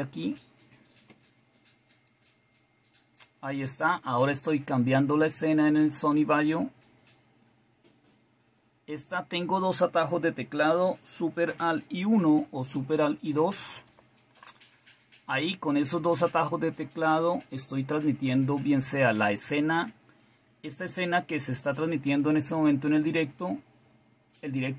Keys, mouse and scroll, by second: 13.5 alt+super+KP_2.